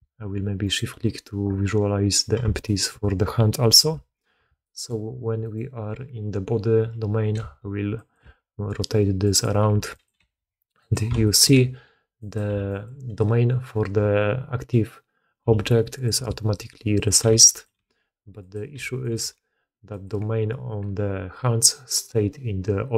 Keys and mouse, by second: 0.6 shift+click, 2.6-2.9 shift+drag, 3.7 KP_3, 4.6 shift+middle drag, 5.4 middle click, 7.3 g, 8.5 r, 11.2 shift+drag, 12.7 g, 14.8 click, 16.4 r, 17.3 g, 18.0 r.